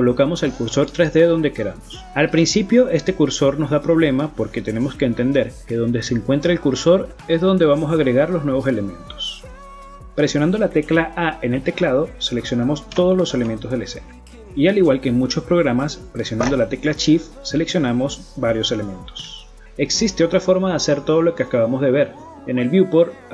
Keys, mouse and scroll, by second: 0.6 middle click, 1.2 click, 1.8 click, 2.2 click, 2.8 click, 3.2 click, 3.8 click, 4.2 click, 4.6 middle click, 5.8 shift+a, 9.3 middle click, 12.1 ctrl+z, 12.8 a, 13.1 a, 13.5 middle click, 14.5 a, 15.1 a, 17.6 middle click, 18.1 right click, 19.0 shift+click, 19.4 shift+right click, 20.4 shift+right click, 21.3 middle click.